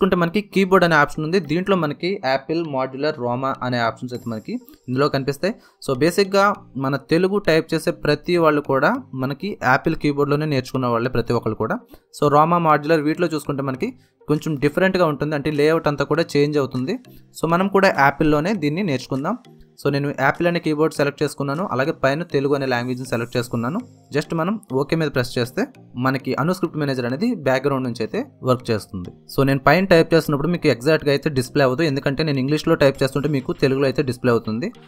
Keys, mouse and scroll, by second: 24.9 click, 27.9 click, 30.7 click, 33.4-34.8 typing.